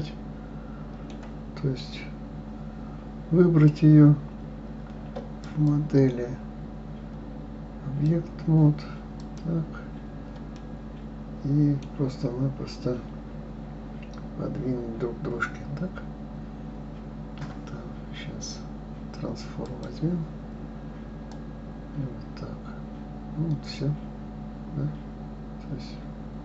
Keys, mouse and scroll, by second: 3.6-8.7 drag, 9.1 click, 10.6-13.5 middle drag, 19.6 click, 21.3-24.3 drag.